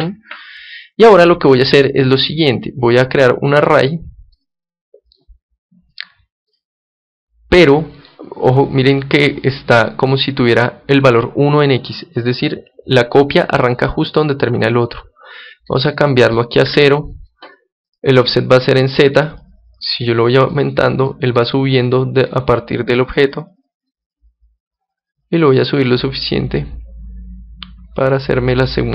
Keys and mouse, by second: 1.7 KP_1, 4.3-6.9 drag, 8.4-10.3 middle drag, 15.9-21.7 drag, 20.5 middle click, 21.7-23.0 middle drag, 23.0-27.7 drag.